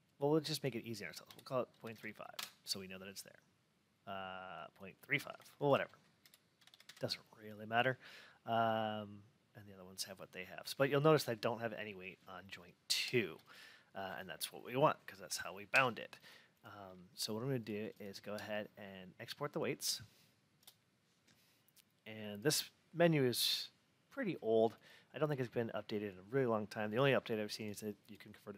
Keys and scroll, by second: 2.2 Return, 15.2 F8.